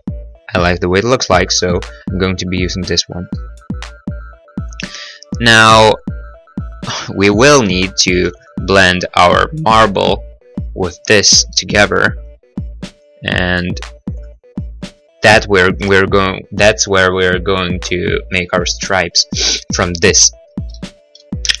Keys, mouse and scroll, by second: 3.7 middle click, 7.3 scroll, 8.5 middle click, 8.6 middle click, 9.9-10.4 scroll, 11.6 middle click, 12.0 middle click, 12.8 click, 14.2 click, 16.3 click, 21.1-21.6 scroll.